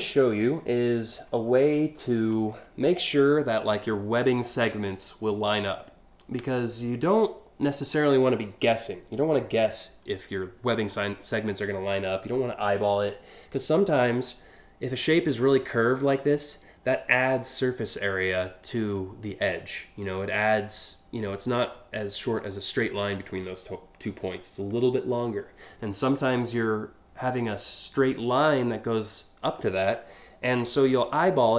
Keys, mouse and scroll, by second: 1.7-2.3 scroll up 2.